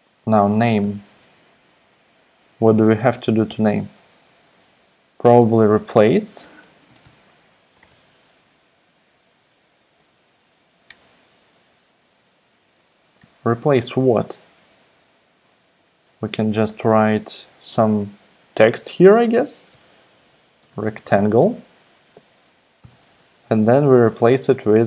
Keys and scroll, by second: 0.2-2.4 typing, 3.5 ., 5.1-8.4 typing, 9.5-11.5 typing, 13.2 BackSpace, 13.4 shift+", 16.6 shift+', 19.3-21.5 typing, 21.7 super+Right, 22.1 Left, 22.8 ,, 22.9 space, 23.2 shift+', 24.7-24.8 typing.